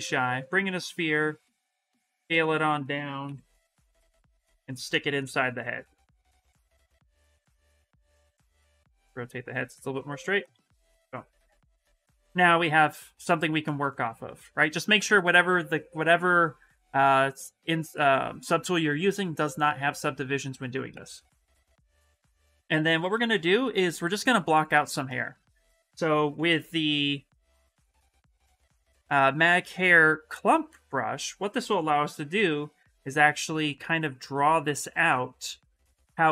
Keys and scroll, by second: 2.0 ctrl+z, 3.0 x, 6.0 q, 6.4 w, 10.5 q, 13.8 s, 21.5 s, 23.0 shift+f, 23.4 shift+f, 25.6 b, 30.8 s.